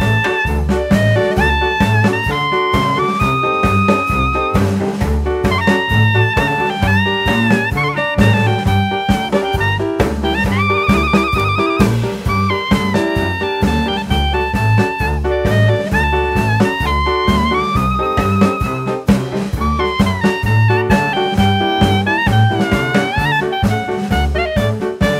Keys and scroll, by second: 7.7 s, 13.2 Tab, 18.8 KP_1.